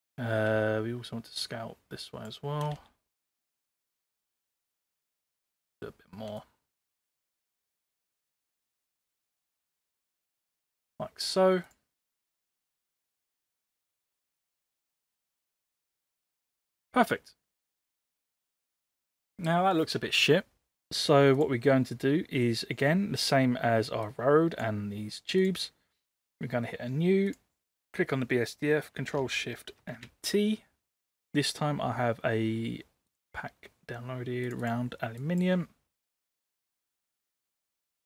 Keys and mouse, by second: 1.5 click, 2.7 space, 3.4-5.1 drag, 5.6 space, 6.4 click, 7.6 space, 8.1-10.1 drag, 11.7 click, 14.0-15.7 drag, 16.3-16.8 middle drag, 17.6 middle drag, 17.8 click, 18.1-18.6 middle drag, 21.4 click, 24.1 click, 25.4 click, 27.2 click, 29.9 ctrl+shift+t.